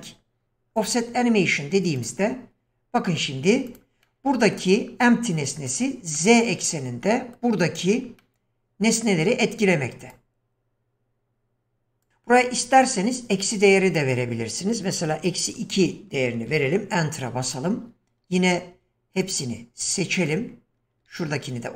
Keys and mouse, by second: 3.7 click, 4.0-4.6 middle drag, 6.2-7.4 middle drag, 8.2-9.2 middle drag, 12.0 drag, 14.0 click.